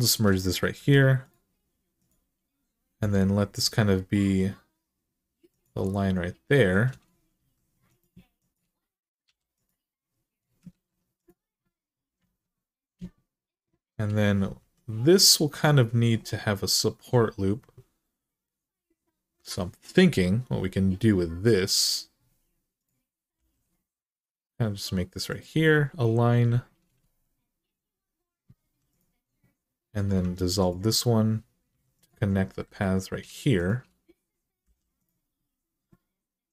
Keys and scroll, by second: 0.5 m, 2.8 g, 7.2 2, 9.0 f, 10.5 ctrl+z, 12.1 alt+z, 14.4 1, 23.1 g, 28.4 2, 30.0 x, 31.5 1, 34.4 j.